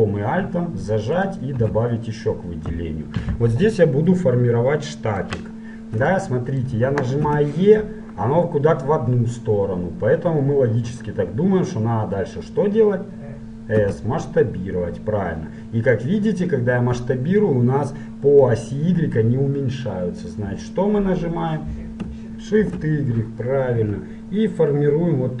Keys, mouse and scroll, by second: 1.1-3.3 right drag, 3.5-6.3 middle drag, 6.7-8.0 middle drag, 7.4 e.